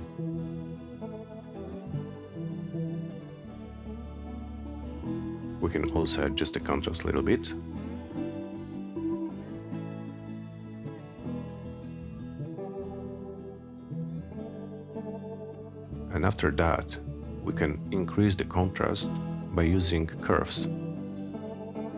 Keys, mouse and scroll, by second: 4.1-5.5 drag, 9.1 Return, 17.0 click.